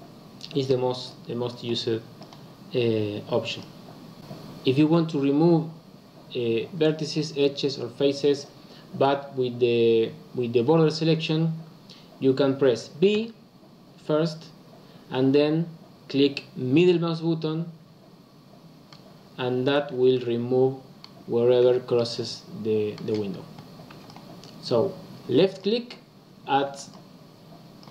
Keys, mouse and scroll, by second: 1.0 click, 1.4 click, 3.5 click, 13.1 b, 19.9 b, 21.6 b, 23.9 b, 26.6 b.